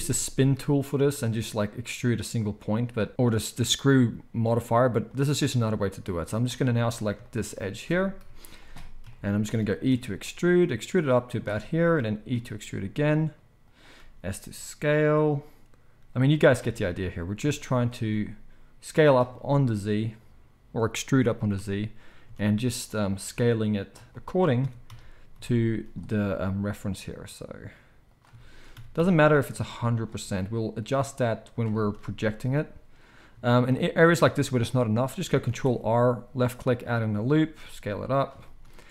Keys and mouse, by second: 5.7-11.4 drag, 8.2 KP_1, 9.9 e, 11.4-38.9 shift+middle drag, 12.3 e, 13.9 s, 16.3 e, 17.9 s, 21.2 e, 23.1 s, 24.6 e, 26.1 s, 28.7 e, 30.1 s, 35.4 ctrl+r, 37.4 s.